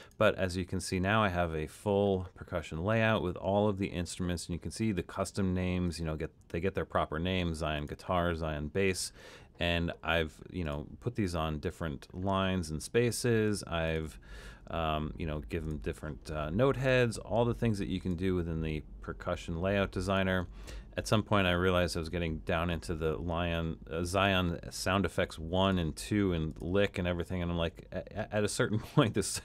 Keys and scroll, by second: 11.3 Down, 12.5 Down, 13.0 Down, 14.7 Down.